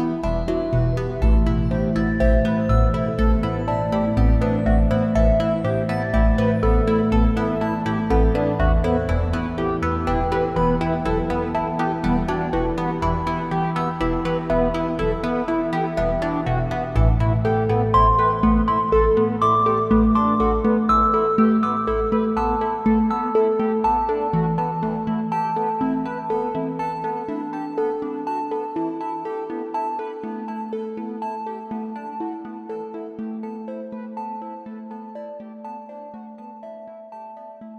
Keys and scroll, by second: 7.5 ctrl+shift+a, 15.1 space, 17.6 ctrl+shift+a, 22.6 space, 24.2 a, 24.8 space, 25.3 space, 27.9 space, 28.8 space, 30.0 space, 35.5 space, 37.2 `, 37.3 space.